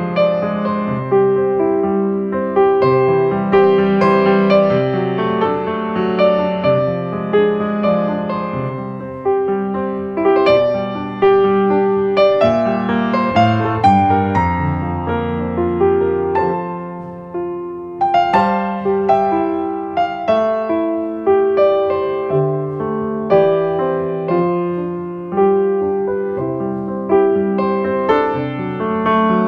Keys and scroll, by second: 3.2 ctrl+space, 6.1 space, 8.3 space, 10.1 space, 11.6 ctrl+space, 13.4 space, 14.1 space, 15.2 ctrl+space, 17.6 space, 22.5 ctrl+space.